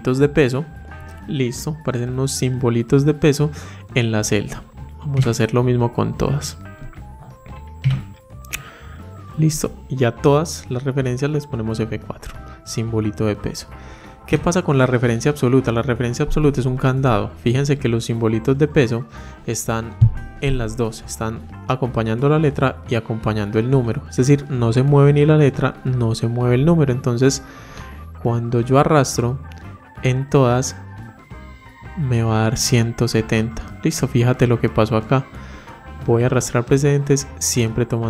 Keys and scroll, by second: 6.6 F4.